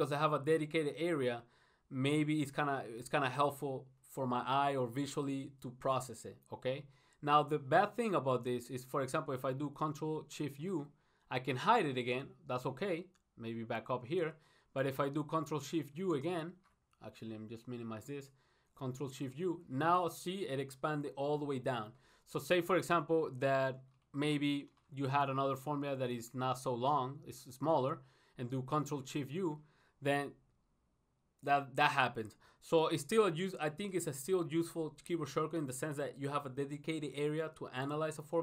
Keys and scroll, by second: 17.7 ctrl+shift+u.